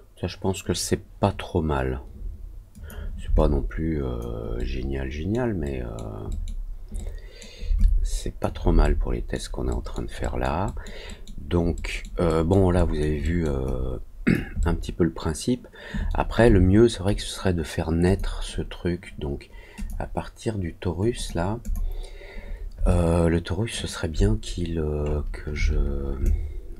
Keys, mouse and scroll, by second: 2.6 click, 3.3 alt+click, 4.5 alt+middle click, 5.6 alt+middle click, 6.2 alt+middle click, 6.9 alt+middle click, 7.7 alt+click, 8.7 alt+middle click, 9.6 alt+middle click, 10.1 alt+middle click, 10.6 alt+middle click, 11.0 alt+middle click, 11.7 alt+middle click, 12.2 alt+middle click, 12.7 alt+middle click, 13.2 alt+middle click, 13.6 alt+click, 14.5-16.0 alt+middle drag, 18.0 click, 19.7 click, 21.1 click, 21.5 click, 22.8 alt+click, 25.0 middle click, 26.2-26.7 alt+drag.